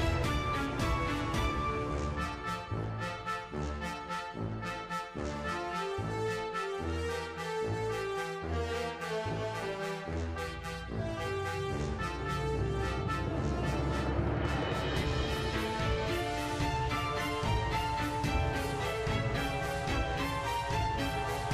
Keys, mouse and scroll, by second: 0.4 click, 0.7 click, 1.3-3.7 typing, 1.5 scroll up 1, 1.6 shift+middle click, 3.0 click, 3.9 click, 4.9 click, 5.2-5.6 drag, 6.0 a, 6.3 i, 7.0-8.7 drag, 8.8-9.9 drag, 10.0 ctrl+z, 10.1 click, 10.6-11.8 drag, 12.5 ctrl+z, 12.7 click, 14.5 a, 14.7 i, 15.2 drag, 15.5 space, 16.3 space, 16.5 drag, 17.0 click, 17.8 a, 18.0 click, 18.3 a, 18.6 click, 19.0 ctrl+c, 19.3 right drag, 19.8-21.4 drag.